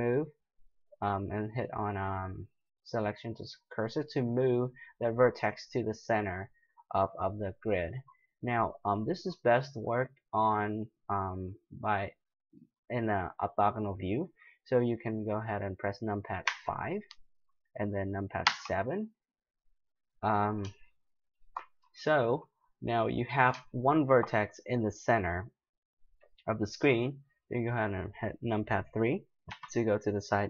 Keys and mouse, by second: 5.2-9.3 middle drag, 12.3-16.4 middle drag, 16.4 KP_5, 18.4 KP_7, 20.8-22.0 middle drag, 29.5 KP_3.